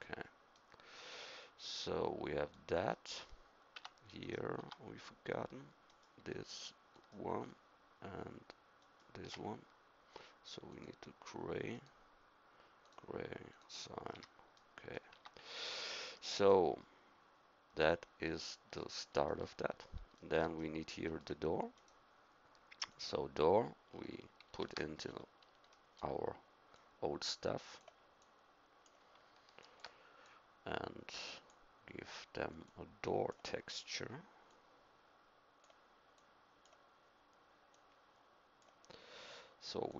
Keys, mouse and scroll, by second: 0.7 middle click, 3.7 Tab, 4.6 Tab, 14.1 a, 15.1 Tab, 19.3 middle click, 20.8 middle click, 21.7-22.9 drag, 24.5 ctrl+v, 28.3 click.